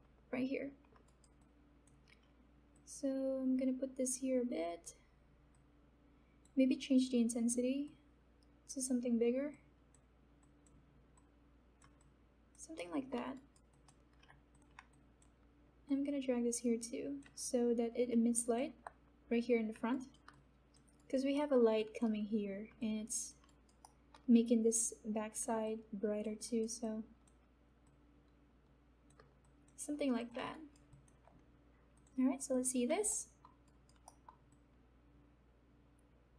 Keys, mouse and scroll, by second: 1.0 alt+right click, 1.5-7.8 alt+drag, 8.1-9.5 drag, 9.9 click, 11.4-12.6 drag, 13.0 alt+middle click, 13.3 alt+right click, 13.7 alt+click, 14.9 click, 15.3-19.9 alt+drag, 19.9 alt+right click, 20.3 alt+click, 20.9 alt+right click, 21.3 alt+middle click, 21.7 alt+click, 22.7 alt+click, 23.5 alt+right click, 23.8 alt+middle click, 25.6 alt+click, 26.6 alt+right click, 26.8-29.7 alt+drag, 30.4 right click, 30.9 alt+click, 33.0 middle click, 33.6 alt+right click, 34.0 alt+middle click, 34.4-36.3 alt+drag.